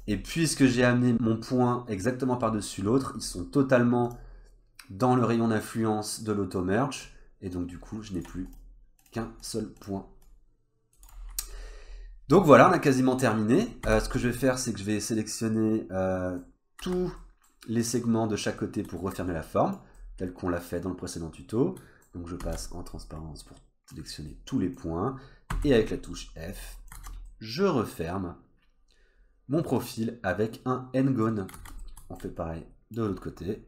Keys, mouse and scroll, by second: 0.5 scroll up 1, 0.7-1.1 scroll down 2, 1.1 click, 1.1-2.5 scroll up 2, 2.5 middle click, 4.1 click, 7.7 click, 8.5 click, 9.0 click, 9.4 click, 11.3-11.8 scroll down 4, 12.2-12.8 scroll up 2, 13.2 scroll down 1, 13.9 2, 15.6 middle click, 16.8 1, 17.2 middle click, 17.9 middle click, 18.6 middle click, 19.3 click, 20.0 middle click, 22.4 alt+z, 22.9 scroll up 1, 23.2 click, 24.3 middle click, 24.8-25.5 scroll down 2, 25.5 f, 25.9-26.4 scroll down 1, 26.4 click, 26.8 middle click, 27.0 alt+z, 27.3 middle click, 31.6 alt+z, 31.8 middle click, 32.4 click.